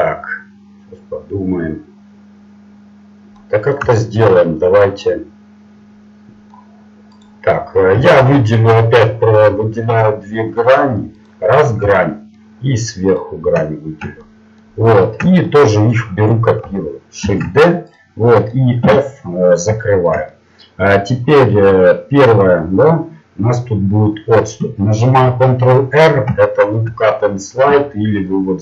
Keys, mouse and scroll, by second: 3.4-7.2 middle drag, 7.2 right click, 11.3-14.1 right drag, 14.1-16.1 middle drag, 17.2 shift+d, 18.8 f, 23.8 middle click, 28.0 t.